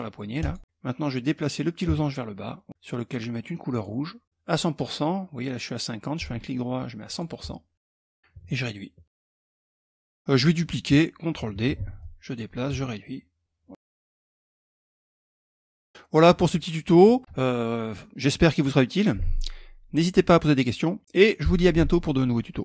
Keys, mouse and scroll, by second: 1.3-2.7 ctrl+drag, 3.2 click, 5.8 right click, 6.6 click, 8.0 ctrl+click, 9.1 click, 11.2 ctrl+d, 11.6 click, 12.6 ctrl+click, 13.6 click, 14.2 ctrl+d, 14.4 click, 15.1-15.5 ctrl+scroll down 2, 15.5-17.3 ctrl+middle drag.